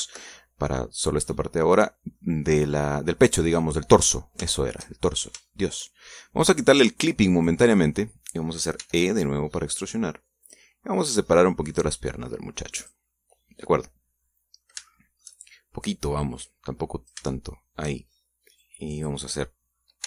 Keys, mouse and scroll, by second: 0.7 ctrl+KP_Subtract, 2.0-3.1 middle drag, 4.0 scroll down 2, 4.6-4.9 scroll up 2, 5.3-6.7 shift+middle drag, 8.1 click, 9.5 e, 11.2 click, 11.9-13.8 drag, 13.8-15.5 middle drag, 15.6 shift+middle click, 16.6-18.0 drag, 18.1 shift+middle click, 19.3 click.